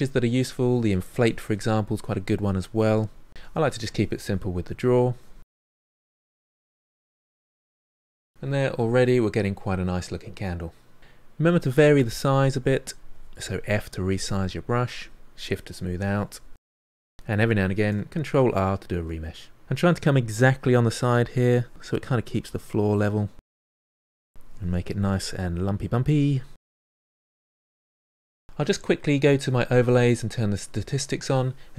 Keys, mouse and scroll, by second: 1.4 middle click, 2.0 click, 2.6 middle click, 2.9-4.5 drag, 4.5 middle click, 4.6 click, 4.8 middle click, 5.1 click, 5.2 middle click, 5.5-6.5 drag, 6.5 middle click, 6.8 click, 7.3 middle click, 7.4 click, 7.6-11.0 middle drag, 11.0 f, 11.2-12.2 drag, 12.2 middle click, 12.3 click, 12.7 middle click, 13.0 ctrl+click, 13.5 middle click, 13.8 shift+click, 14.1 middle click, 14.2 click, 14.6 middle click, 14.7 click, 15.1 middle click, 15.2 click, 15.5 middle click, 15.6-18.2 drag, 18.2 ctrl+r, 18.6 middle click, 19.4-20.4 shift+drag, 20.4 middle click, 20.7 click, 21.4 middle click, 22.0 click, 22.5 middle click, 22.9 click, 23.7 middle click, 24.0 click, 24.3 middle click, 24.5 click, 25.3 middle click, 25.5 click, 25.9 middle click, 26.0 click, 26.5 middle click, 26.8 click, 27.0 middle click, 27.1 click, 27.7 f, 27.9-31.7 drag.